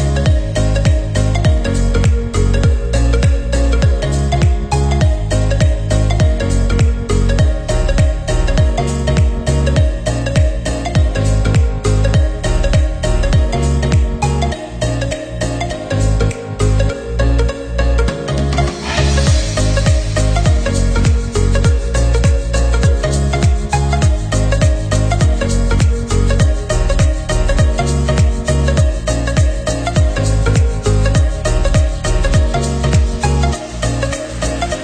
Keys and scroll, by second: 11.3 ctrl+=, 13.3 Right, 14.9 ctrl+-, 29.2 ctrl+-.